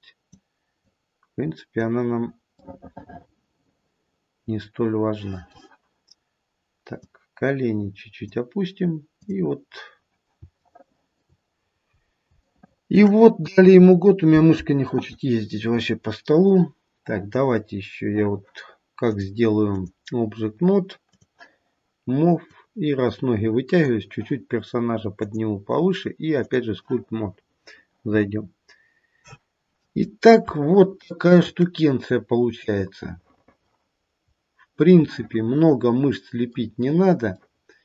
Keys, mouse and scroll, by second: 0.8 click, 2.7 middle click, 5.4 middle click, 7.0 click, 9.2 click, 11.3 shift+middle click, 11.6 scroll down 1, 11.9 scroll up 2, 12.6 shift+middle click, 12.8 shift+middle click, 13.4 KP_1, 13.9-14.6 scroll down 1, 15.5-16.4 scroll down 2, 15.9-16.4 scroll up 1, 16.7-17.4 scroll down 1, 19.7 click, 21.1 click, 22.4 click, 25.1 click, 28.4-29.5 scroll up 2, 29.5-30.3 scroll up 1, 30.7 shift+middle click, 34.2-34.9 scroll down 1, 34.9 middle click.